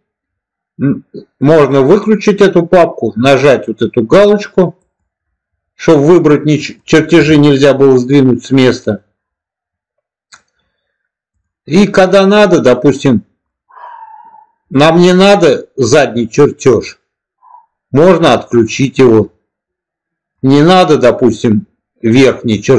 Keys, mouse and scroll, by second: 4.7 click, 6.0 click, 6.5 click, 6.9 click, 7.2-8.2 middle drag, 13.4 middle click, 14.7-15.5 middle drag, 18.4 click, 19.0-20.2 middle drag.